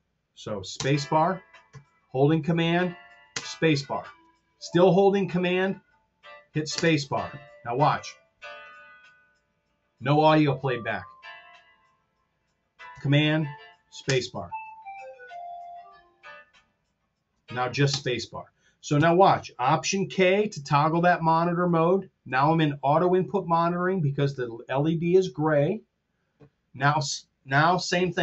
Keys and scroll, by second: 0.6 space, 3.4 super+space, 6.7 super+space, 14.0 super+space, 17.9 space, 18.8 super+z, 20.2 alt+k.